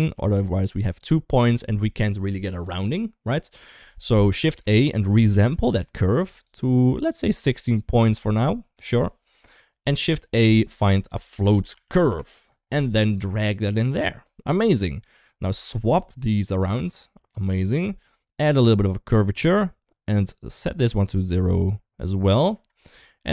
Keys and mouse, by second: 0.1 shift+middle click, 4.3 shift+a, 6.9-8.6 drag, 8.8-9.4 drag, 9.9 middle click, 10.2 shift+a, 13.4 click, 15.0 click, 16.7 click, 18.3 click, 20.1-21.8 drag, 23.1 click.